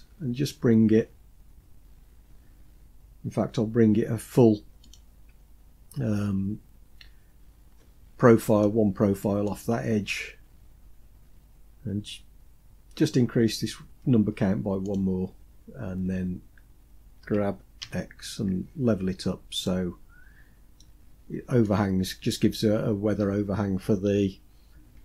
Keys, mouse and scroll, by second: 7.0-7.6 scroll down 3, 7.4 scroll up 1, 7.6-8.2 scroll down 3, 8.2-9.4 shift+middle drag, 9.6-11.2 scroll up 7, 14.4 click, 16.8 g, 19.8-20.4 scroll down 3, 20.4 middle click, 24.4-25.0 scroll down 4.